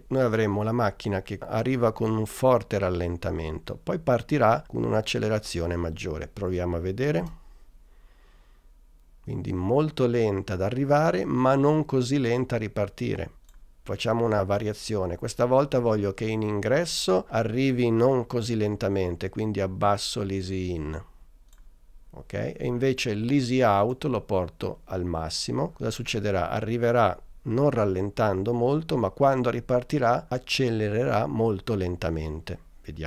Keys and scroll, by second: 7.3 space.